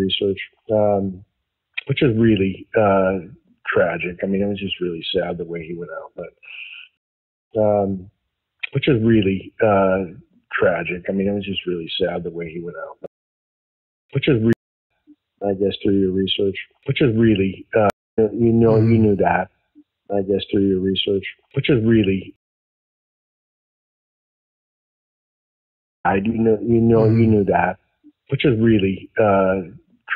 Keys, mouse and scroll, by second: 6.9 space, 7.3 click, 7.4 space, 7.8-9.0 drag, 11.0-13.0 drag, 13.0 space, 13.7 ctrl+shift+Delete, 14.0 space, 14.4 space, 14.7 click, 14.8 space, 17.8 space, 18.0 click, 18.1 space, 20.7-22.1 drag, 22.3 space, 22.8 click, 23.9-25.0 drag, 25.9 click, 25.9 space, 29.0 ctrl+s.